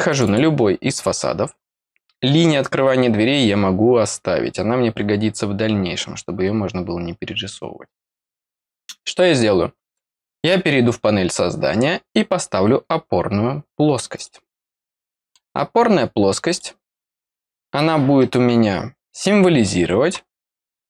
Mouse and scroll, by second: 0.0 click, 1.5-9.8 middle drag, 1.5-3.2 scroll down 1, 3.2-9.8 scroll down 1, 9.8 click, 14.1 click, 14.9 middle click, 16.4 click, 17.4 click.